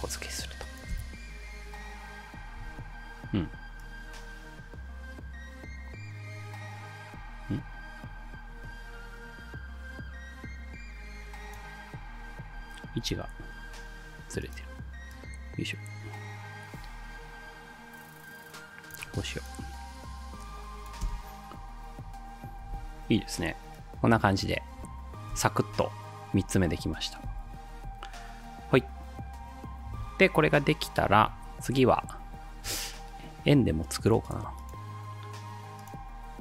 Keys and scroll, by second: 1.0 space, 2.6 space, 13.1 v, 21.1 space, 22.6 space, 25.3 space, 27.3 space, 27.7 ctrl+s.